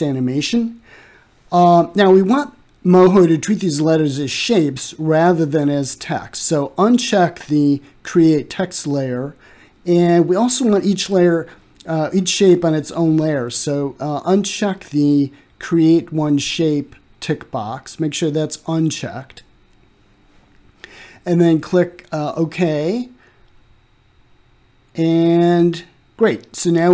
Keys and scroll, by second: 0.0-0.9 typing.